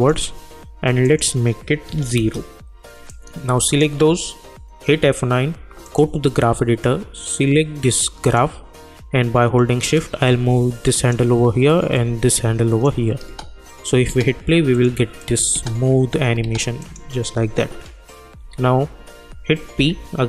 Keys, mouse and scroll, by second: 2.1 Return, 3.1-4.8 drag, 4.8 F9, 5.8-11.9 drag, 7.1-8.4 drag, 11.9 click, 13.3 space, 14.7 click, 15.5 space, 16.8 click, 18.4 u, 19.7 p.